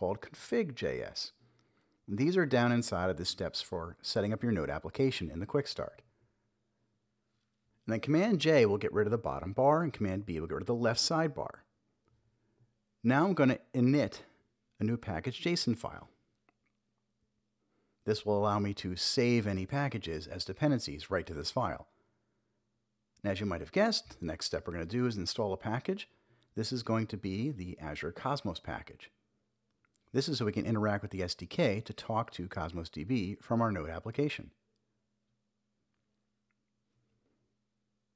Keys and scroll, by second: 0.5 Return, 1.6-3.2 typing, 6.5 super+j, 11.3-14.3 typing, 14.9 Return, 17.4-18.4 typing, 19.1 super+j, 21.4 super+-, 24.4-30.3 typing, 31.3 Return, 36.3 super+b.